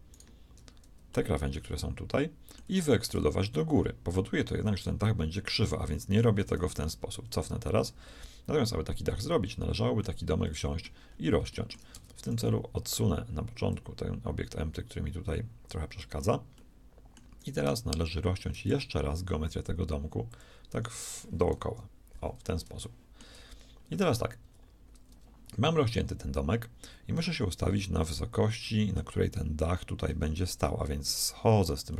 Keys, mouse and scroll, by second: 1.1-2.1 middle drag, 2.1 click, 3.2 e, 7.1 ctrl+z, 9.1-12.3 middle drag, 11.9 shift+Tab, 13.1-14.3 right drag, 13.7-15.7 drag, 16.5 middle click, 17.4-18.5 drag, 17.4-19.3 right drag, 17.7 Tab, 18.7 ctrl+r, 21.6 KP_1, 24.5 z, 27.5-31.9 middle drag.